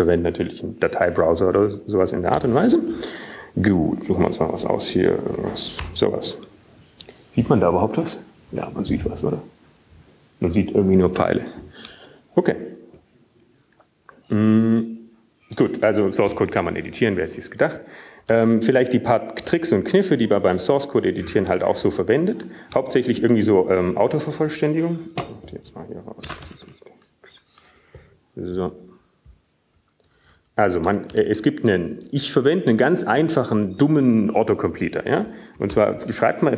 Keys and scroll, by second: 5.7-6.5 typing, 6.6 Down, 12.9 Return, 20.4-21.4 typing, 33.0 typing, 34.1-35.2 typing, 35.4 Down.